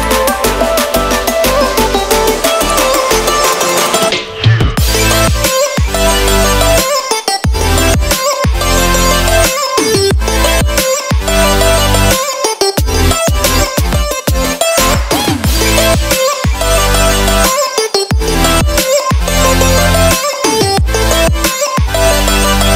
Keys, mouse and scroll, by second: 0.4-0.8 scroll down 3, 0.6 middle click, 1.7-2.1 scroll down 3, 2.1 middle click, 4.1 click, 4.4 shift+middle click, 4.7 middle click, 5.1-5.4 scroll down 1, 5.4 click, 5.9 shift+a, 11.3 click, 13.5 click, 16.0 middle click, 16.6 ctrl+middle click, 17.5 shift+middle click, 17.8 middle click, 19.9 shift+a.